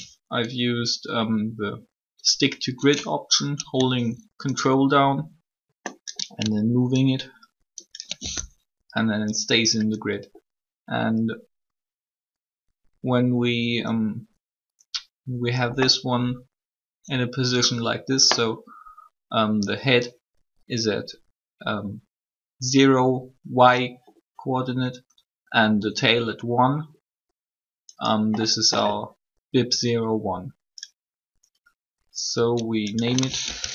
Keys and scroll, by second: 33.4-33.7 typing.